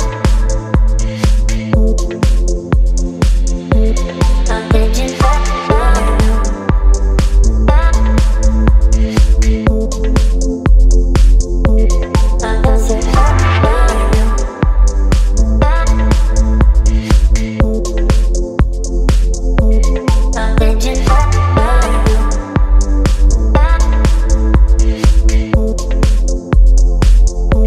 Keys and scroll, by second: 1.5 Down, 3.7 space, 5.4 Up, 7.7 Up, 7.9 Up, 8.0 Up, 13.9 t.